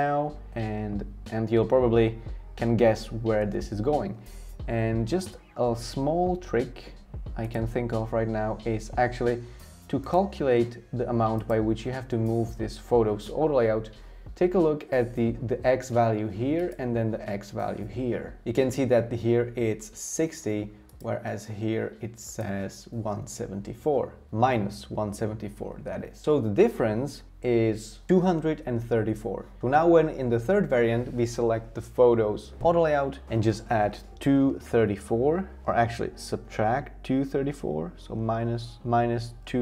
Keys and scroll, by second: 34.2-36.1 typing, 37.4 Tab, 38.3-39.6 typing.